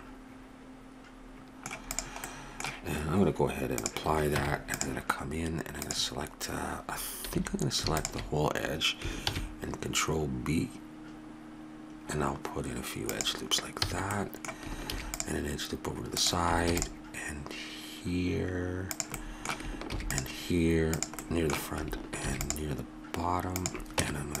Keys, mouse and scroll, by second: 1.9-4.1 drag, 4.4 Tab, 5.8 right click, 7.3 a, 9.2 ctrl+b, 13.8 a, 14.8 ctrl+r, 16.6 ctrl+r, 19.9 ctrl+r, 22.2 ctrl+r, 24.0 Tab.